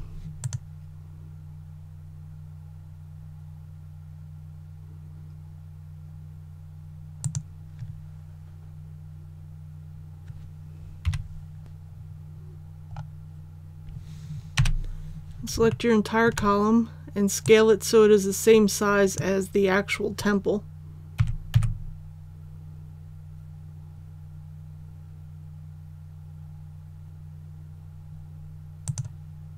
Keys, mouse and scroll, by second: 0.4 click, 11.0 KP_1, 11.9 scroll down 1, 13.0-14.6 scroll up 1, 14.6 i, 15.7-16.3 shift+scroll down 1, 17.4-19.7 drag, 21.2 s, 21.6 z, 28.9-29.5 drag.